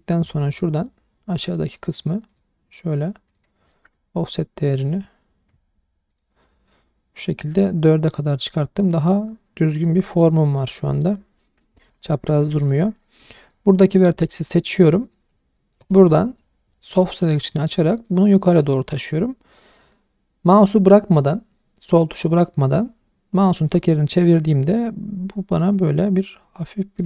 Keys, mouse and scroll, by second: 1.6 click, 2.3 click, 3.3 click, 3.7-4.8 middle drag, 5.0-5.3 scroll down 2, 6.1 click, 10.2 middle click, 10.9 middle click, 11.1 scroll up 1, 11.7 shift+middle click, 12.0 middle click, 12.3 1, 12.6 click, 15.8 click, 16.7-17.0 scroll down 2, 17.0 shift+middle click, 17.2 middle click, 18.0 click, 23.7 scroll down 2, 24.7-25.8 scroll down 4, 25.8 scroll down 2.